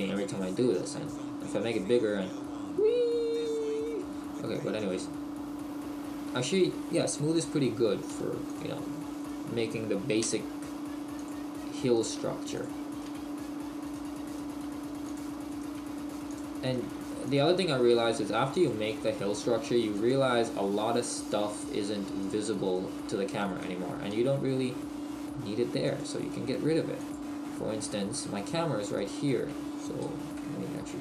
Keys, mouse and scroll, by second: 8.5 click, 9.2 right click, 10.2 g, 11.3 click, 11.9 right click, 12.0 g, 12.6 click, 12.9 right click, 13.9 g, 13.9 right click, 14.5 g, 15.2 click, 15.5 right click, 15.8 g, 16.4 click, 16.7 right click, 16.9 g, 17.4 click, 17.8 right click, 17.9 g, 18.7 click, 19.0 right click, 19.3 g, 20.1 click, 20.5 right click, 20.8 g, 21.3 click, 21.5 right click, 21.7 g, 22.3 click, 22.7 right click, 23.0 g, 23.6 right click, 24.1 g, 26.0 click, 26.5 g, 27.1 click, 28.4 right click, 28.9 right click, 30.6 Tab.